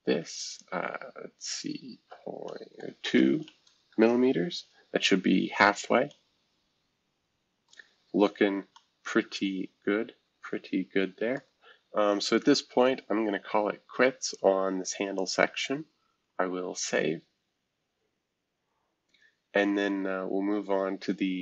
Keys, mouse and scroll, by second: 0.2-3.3 drag, 3.3 BackSpace, 3.4 BackSpace, 3.9 Return, 5.6-7.7 scroll up 1, 7.7-8.7 middle drag, 7.8-8.3 scroll down 1, 8.3-9.4 scroll up 1, 9.4-11.3 scroll up 1, 11.3 scroll up 1, 11.4-12.8 middle drag, 14.2 click, 15.2 click, 16.0 ctrl+s, 19.2-20.7 scroll down 2, 20.7-21.4 scroll down 1.